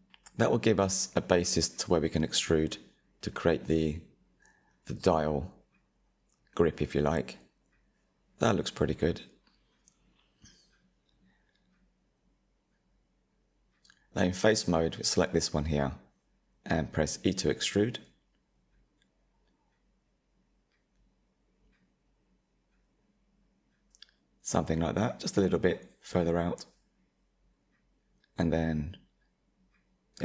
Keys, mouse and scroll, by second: 1.1 click, 4.6 click, 5.9-8.9 middle drag, 13.7 3, 15.6 click, 19.4-23.6 middle drag, 23.6 e, 27.3-28.8 middle drag, 28.8 click.